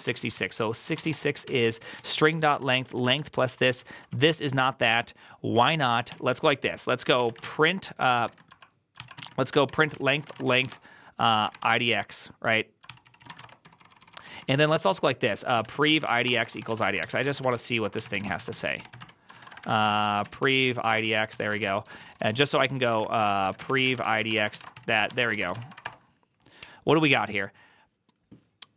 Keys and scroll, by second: 0.0-4.4 typing, 0.2 ctrl+c, 6.0-25.4 typing, 8.0 ctrl+c, 8.8 ctrl+c, 9.5 Tab, 9.8 ctrl+c, 20.9 ctrl+c, 24.6 ctrl+c, 25.5 ctrl+c, 25.6 Up.